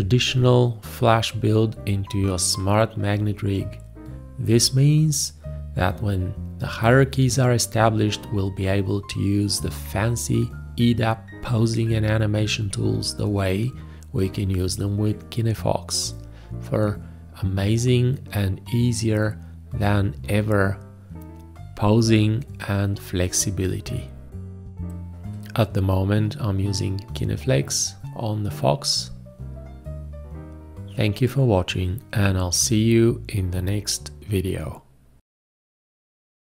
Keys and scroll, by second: 12.2 ctrl+space, 13.7 g, 29.6 space.